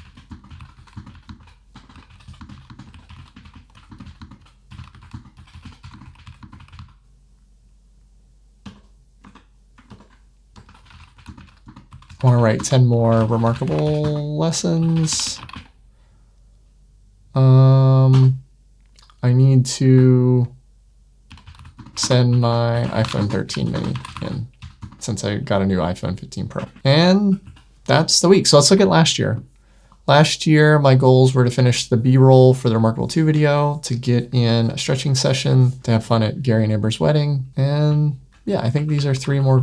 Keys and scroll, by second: 8.5 Return, 9.1 shift+Tab, 9.8 super+Return, 18.0 Return, 26.6 ⟲.